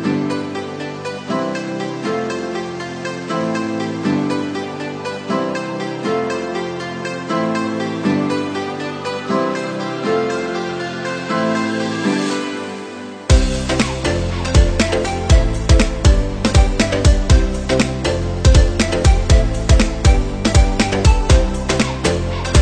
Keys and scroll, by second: 1.1 ctrl+-, 6.2 ctrl+c, 6.4 ctrl+v.